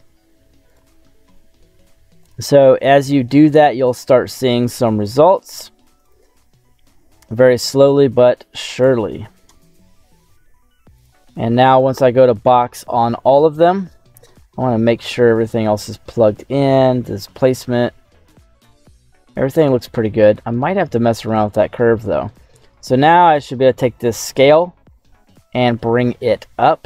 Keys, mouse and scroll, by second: 1.3 middle click, 2.1 click, 3.5 middle click, 4.9-6.1 drag, 6.5 middle click, 8.0-9.5 drag, 9.5 middle click, 10.9 click, 13.7 middle click, 13.8-14.6 scroll down 4, 14.5 middle click, 15.1 scroll down 1, 15.2 scroll up 2, 15.6-19.8 middle drag, 20.2-21.8 middle drag, 22.0 middle click, 22.4-23.0 scroll up 4, 23.0 middle click, 24.1-26.8 drag.